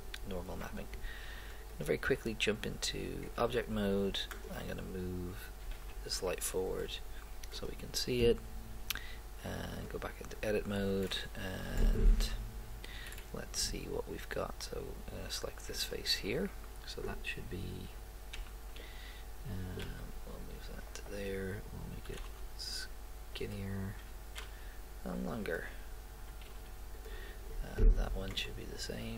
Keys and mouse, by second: 1.9 click, 4.3-6.2 right drag, 5.7 g, 15.8-17.3 right drag, 18.4 a, 19.8 g, 22.0 s, 24.1 s, 26.4 s.